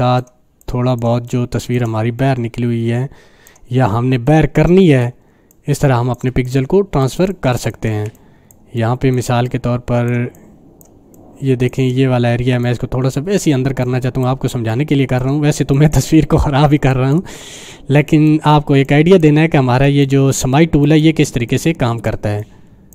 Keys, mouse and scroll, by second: 1.0 space, 1.4 click, 1.5-1.9 space, 2.2-3.7 drag, 6.2-11.8 typing, 6.4 click, 7.4 click, 8.1-8.8 click, 9.4 click, 10.3 click, 11.1 click, 12.6 click, 12.6-13.5 drag, 15.3 space, 15.7 click, 15.8 space, 18.0 click, 18.1 space, 18.8 click, 19.0-19.5 space, 19.7 space, 20.8 click, 21.0 space, 21.5 click, 21.5-22.1 space, 22.4 click, 22.4 click, 22.5-22.9 space.